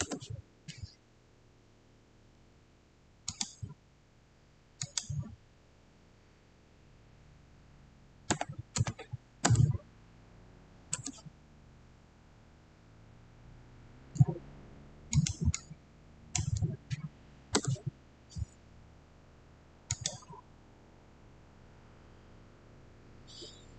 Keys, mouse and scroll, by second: 3.1 Return, 3.2 click, 8.2 click, 8.3-8.6 typing, 9.3 Return, 15.0 Return, 15.0-17.5 drag, 17.5 Return, 19.8 Return, 19.8 click.